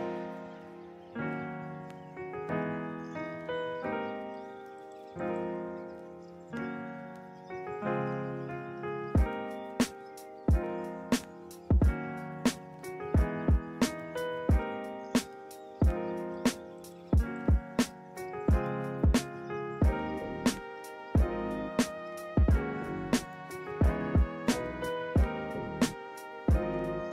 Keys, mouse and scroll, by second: 6.0 ctrl+z, 6.8 ctrl+z, 9.8 ctrl+z, 10.9 ctrl+z, 16.0 ctrl+-, 21.9 right click, 22.7 right click.